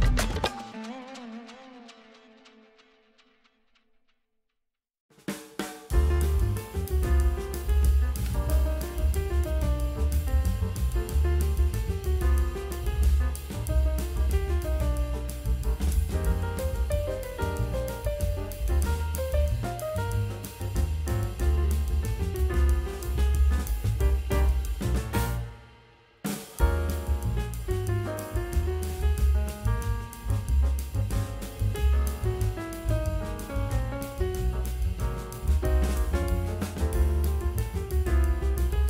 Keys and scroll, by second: 2.1 space, 2.3 space, 3.1 ctrl+space, 3.2 l, 3.7 ctrl+alt+d, 3.9 ctrl+j, 3.9 ctrl+t, 4.5 v, 4.6 ctrl+e, 4.7 v, 5.2 l, 5.8 Delete, 5.9 ctrl+d, 6.0 ctrl+space, 6.1 ctrl+space, 6.2 v, 9.1 v, 9.7 ctrl+e, 10.0 ctrl+[, 14.2 space, 18.3 space, 18.8 space, 20.7 space, 21.6 space, 26.2 9, 28.7 ctrl+space, 32.9 space, 33.3 space, 33.4 ctrl+d, 33.5 space, 34.0 space, 34.2 ctrl+alt+u, 34.6 ctrl+space, 34.7 ctrl+space, 35.9 space, 36.6 space.